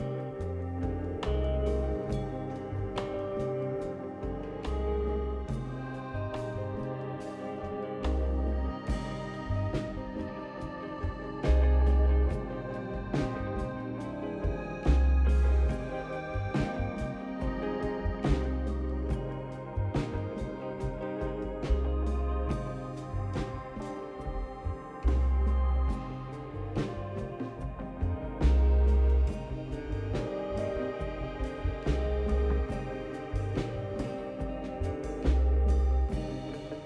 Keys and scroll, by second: 1.1 ctrl+d, 2.3-3.3 typing, 8.6-9.3 typing, 11.3 typing, 11.4 Return, 15.3-16.0 typing, 22.5-23.4 typing, 24.6 Delete.